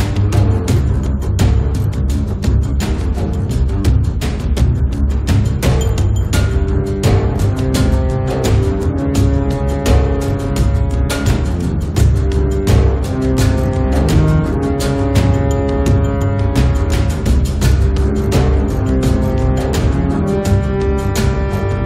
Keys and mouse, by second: 0.2 middle click, 0.8 f, 1.1-2.1 drag, 2.1 ctrl+z, 2.2-3.9 drag, 3.9 middle click, 4.1-6.0 drag, 4.4 middle click, 4.4 right click, 5.5-7.1 middle drag, 5.5 right click, 7.1 click, 8.1-12.4 middle drag, 8.4 f, 8.5-10.2 drag, 12.4 click, 12.5-14.0 middle drag, 12.8-18.7 drag, 12.8-14.0 right drag, 14.4 middle click, 18.7 middle click, 18.7 click, 19.5 1, 19.7 f, 20.3 f, 20.9-21.8 drag.